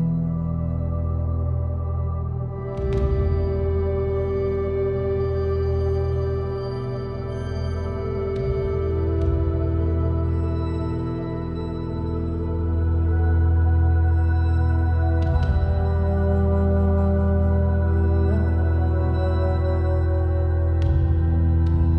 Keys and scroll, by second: 5.9-7.6 typing.